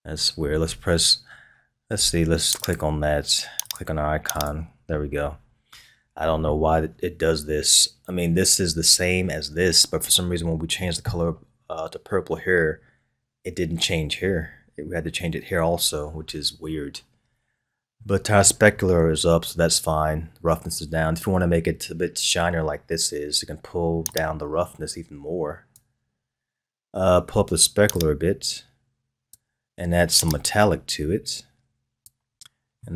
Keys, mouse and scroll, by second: 2.6 click, 17.9-18.8 middle drag, 18.8-21.8 scroll down 1, 24.1-27.1 drag, 27.9-32.3 drag, 32.3-32.8 scroll up 1, 32.8-32.9 middle drag.